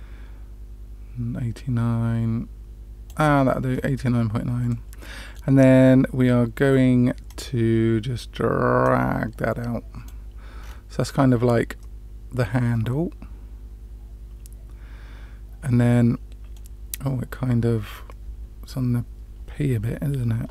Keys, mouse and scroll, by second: 4.6-5.4 middle drag, 7.2 click, 8.8-10.1 drag, 10.6-11.1 scroll down 2, 11.7-16.5 middle drag, 11.7 scroll down 1.